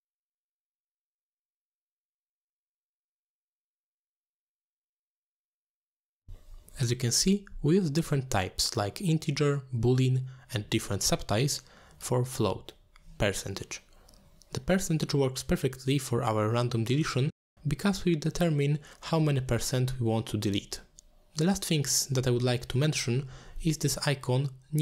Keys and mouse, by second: 0.5 click, 0.7 e, 1.0 shift+click, 1.7 t, 2.0 click, 2.1 click, 3.1 click, 3.7 shift+click, 4.7 click, 4.7 shift+click, 5.2 t, 6.0 click, 6.2 click, 9.3 click, 19.2 click.